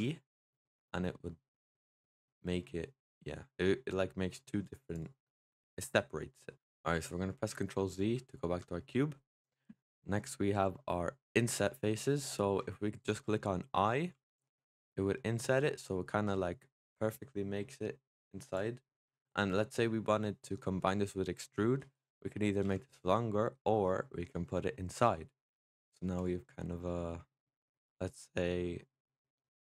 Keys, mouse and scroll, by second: 4.8 click, 5.1-6.5 middle drag, 6.5-6.9 scroll up 3, 6.9-7.6 scroll down 2, 7.6 ctrl+z, 8.0 ctrl+z, 11.7-14.0 middle drag, 14.0 i, 18.7 middle click, 19.1-22.4 scroll up 2, 22.5 e, 25.7 middle click, 26.0 click, 26.3 middle click, 26.9-27.2 scroll up 3, 27.2-28.4 middle drag, 28.4-28.9 scroll down 4, 28.9-29.6 middle drag.